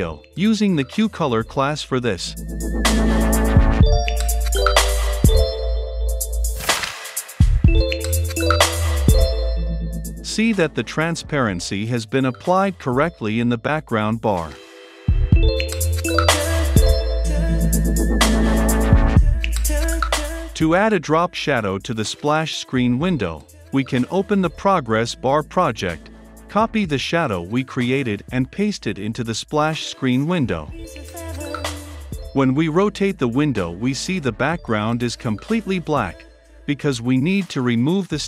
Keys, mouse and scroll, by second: 0.0-2.1 typing, 0.2 Return, 2.5 Return, 3.7-7.4 drag, 7.4 Return, 8.5 ctrl+F5, 18.9 click, 20.1 shift+3, 21.4-22.8 drag, 24.0 click, 24.8 right click, 25.5-26.7 drag, 26.7-28.4 typing, 28.9 ctrl+v, 30.1-31.1 drag, 31.2 shift+Tab, 31.5 click, 31.8 F5, 31.8-33.3 drag, 33.5 ctrl+F5.